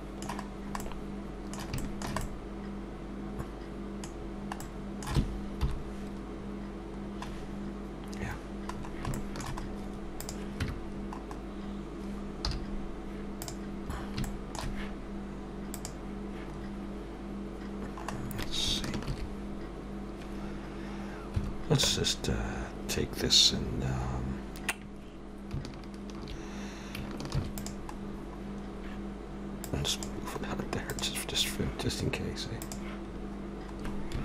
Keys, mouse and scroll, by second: 0.8 middle click, 1.8 shift+middle click, 2.2 middle click, 4.1-4.8 scroll down 3, 4.6 middle click, 5.6 KP_7, 6.4 scroll up 2, 7.0 scroll down 1, 8.6-9.1 scroll up 3, 9.1 shift+middle click, 9.6 scroll up 1, 27.6 shift+d, 28.0 scroll down 1, 28.6-29.5 scroll down 5, 29.7 click, 30.5 scroll up 3, 30.9 click.